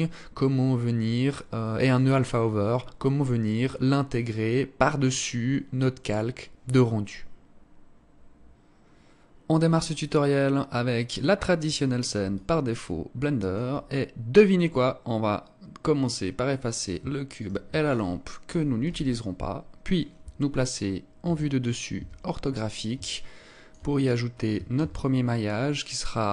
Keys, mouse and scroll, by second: 12.4 alt+click, 14.6-15.5 scroll up 1, 15.5-16.2 scroll down 1, 17.4 shift+right click, 18.4 Delete, 21.2 KP_7, 21.9 KP_5, 23.1 alt+shift+click, 23.9 scroll up 1, 24.6 scroll up 1, 24.7 shift+a.